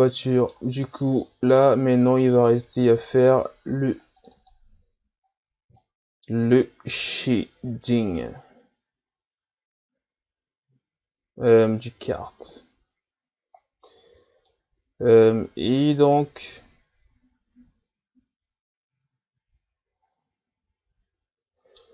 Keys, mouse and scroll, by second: 0.0 scroll down 1, 0.3-1.7 middle drag, 1.7-5.3 drag, 5.3-5.6 scroll up 4, 5.8-6.6 middle drag, 6.6 scroll up 1, 11.7-12.9 scroll up 1, 12.9 scroll up 1, 13.0-14.3 scroll down 1, 14.3 scroll down 1, 14.5-17.5 middle drag.